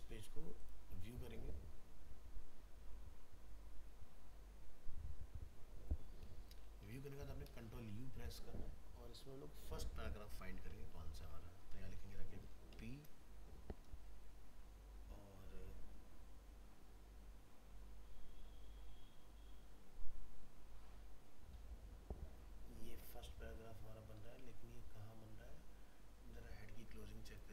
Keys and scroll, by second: 6.9 ctrl+u, 11.1 ctrl+f.